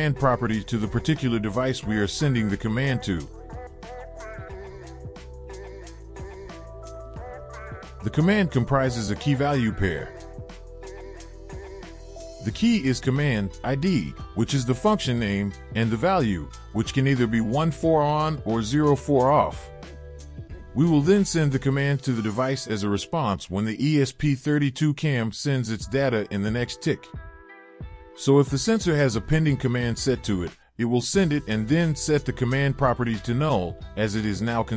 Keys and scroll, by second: 26.7 Return, 27.3 ctrl+v, 28.1 Return, 30.0 Return.